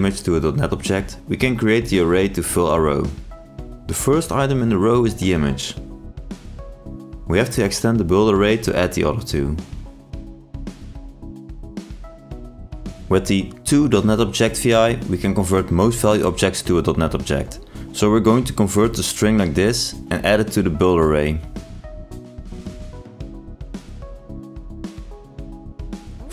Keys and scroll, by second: 0.7 ctrl+space, 12.7 ctrl+space.